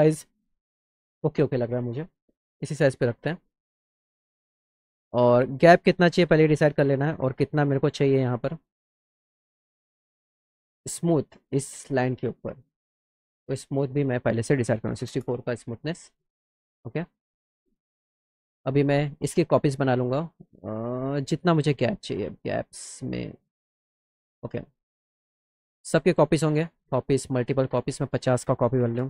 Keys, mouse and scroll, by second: 6.0 drag, 11.3-13.3 drag, 13.9 click, 17.6 click, 19.2-24.0 shift+drag, 26.0 click, 26.3 click, 26.4-27.5 drag, 27.9 click.